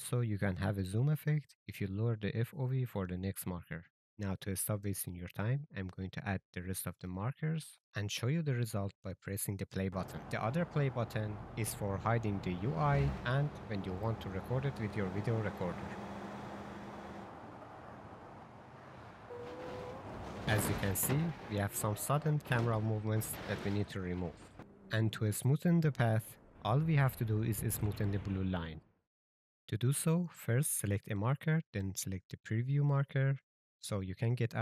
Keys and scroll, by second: 2.1-3.9 typing, 8.0-10.4 typing, 24.6 j, 28.9-31.9 typing, 33.6 s.